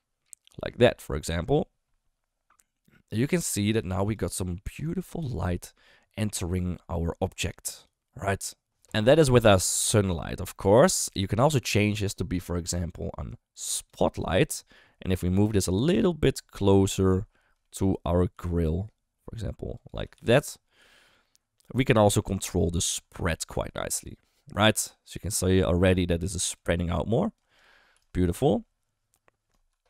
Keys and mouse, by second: 3.5 click, 4.0 click, 5.2-5.5 shift+middle drag, 7.7 click, 10.0 click, 13.8 click, 14.8 middle drag, 15.6 shift+middle drag, 16.8 shift+middle click, 17.6 shift+middle drag, 18.3 g, 20.0 g, 23.5 KP_0, 26.4-27.3 d, 26.5 click, 27.4 click, 27.6 d, 27.9 d, 28.0-29.5 right drag, 29.5 d, 29.6 d, 29.7 d.